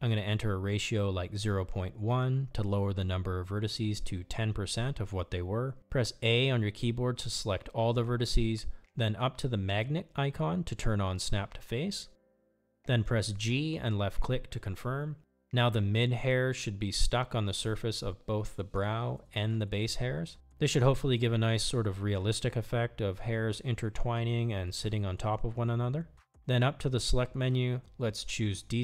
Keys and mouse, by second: 5.7 Tab, 6.2 a, 8.9 click, 10.0-13.4 drag, 13.7 g, 16.0 middle click, 20.4-26.7 middle drag, 27.2-28.8 drag.